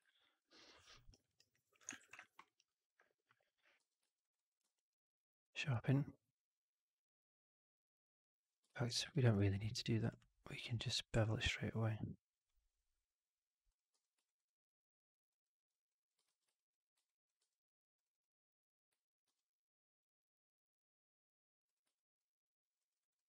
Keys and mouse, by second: 0.0 alt+middle click, 0.5 alt+click, 0.8 alt+middle click, 1.0 alt+right click, 1.2 alt+right click, 1.4 alt+click, 1.9 shift+x, 2.1 alt+middle click, 2.4 alt+right click, 2.6 alt+click, 3.7 4, 4.1 alt+right drag, 4.3 alt+drag, 4.5 q, 8.6 ctrl+z, 9.0 alt+click, 9.9 click, 11.0 alt+b, 13.8 4, 14.2 right drag, 14.4-15.2 drag, 15.3 middle click, 15.8 click, 16.2 shift+x, 16.5 alt+click, 17.0 alt+right click, 17.3 2, 18.1 click, 19.2 alt+b, 21.9 alt+click, 22.7 alt+middle click, 22.9 alt+right click, 23.1 alt+click.